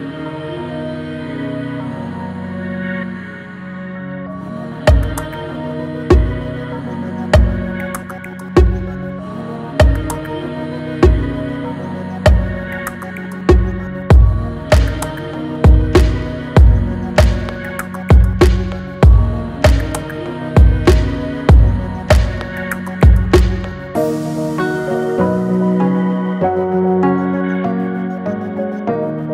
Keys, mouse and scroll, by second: 16.0 click, 20.4 click, 20.5 click, 25.8 click.